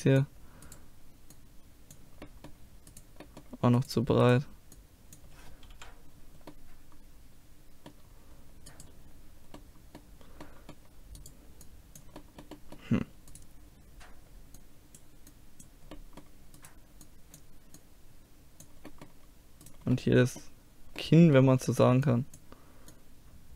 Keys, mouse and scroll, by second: 0.7-2.1 drag, 1.3 right click, 2.1-3.3 middle drag, 3.3-4.7 drag, 4.7 middle click, 5.7 KP_5, 5.9 click, 6.5-8.7 middle drag, 8.7 right click, 9.6 click, 9.9-11.6 middle drag, 11.6-14.6 drag, 11.6-14.6 right drag, 15.0 right click, 15.2 click, 16.0-17.8 right drag, 18.5 click, 18.9 right click, 19.0 click, 19.7-21.9 middle drag, 22.1-23.5 drag.